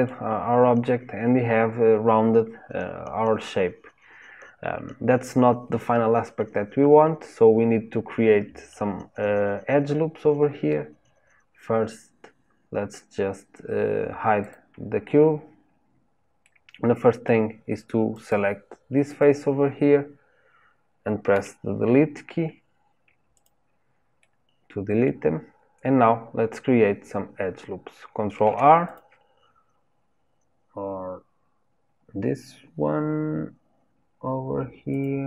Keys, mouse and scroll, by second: 14.4 click, 15.2 scroll up 2, 15.9-16.4 scroll down 1, 16.4-18.1 middle drag, 18.1 click, 19.0 click, 21.3 Delete, 24.2-25.4 middle drag, 25.4-26.0 scroll up 2, 26.0-28.4 scroll down 1, 28.4 ctrl+r.